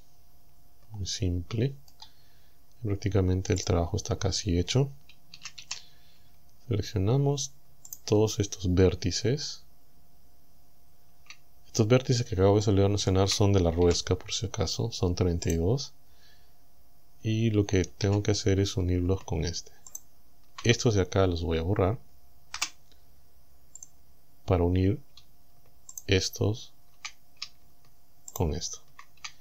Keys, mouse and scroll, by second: 2.4 scroll up 2, 3.7 click, 4.1 scroll up 2, 5.4 a, 7.9 alt+shift+right click, 12.7 shift+right click, 13.9 g, 15.5 right click, 18.1 a, 19.9 alt+shift+right click, 21.4 scroll down 2, 22.6 Delete, 23.8 click, 26.0 alt+shift+right click, 28.3 alt+shift+right click.